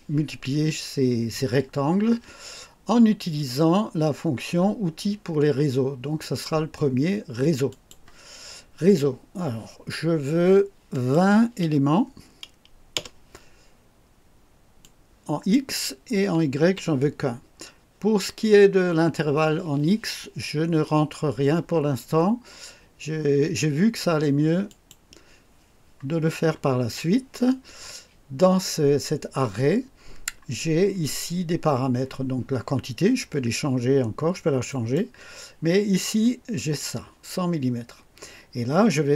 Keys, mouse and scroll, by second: 6.1 click, 7.6 click, 10.9 click, 12.9 KP_0, 14.7 click, 16.5 1, 24.6 click, 30.0 scroll down 2, 30.7 scroll down 2, 34.6 click, 36.5 click.